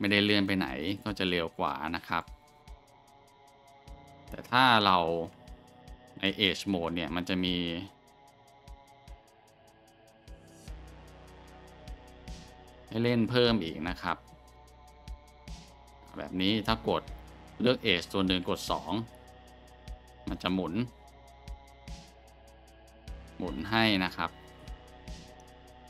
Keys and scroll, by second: 5.2 Tab, 6.7 q, 12.3 b, 12.9-15.1 scroll, 16.0 scroll, 16.9-17.6 scroll, 18.4 2.